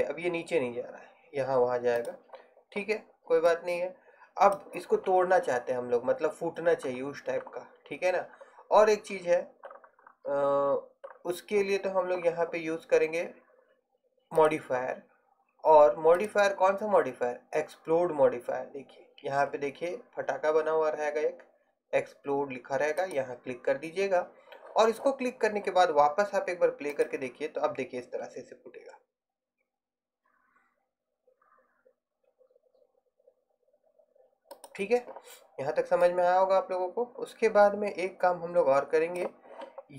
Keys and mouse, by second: 2.3-5.4 drag, 14.5-18.2 drag, 27.0-28.9 drag, 36.5-38.0 drag.